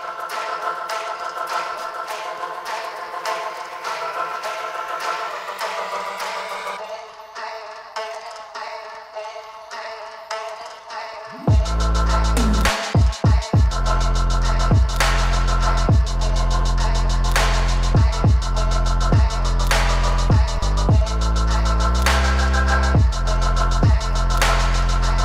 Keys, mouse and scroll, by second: 4.3-7.1 drag, 8.4 click, 9.6-12.6 drag, 12.7 click, 13.9 F5, 14.8 click, 15.8-19.0 drag, 19.7 F5, 20.2 scroll up 2, 22.4-23.6 scroll up 7, 23.6 click, 24.5 click.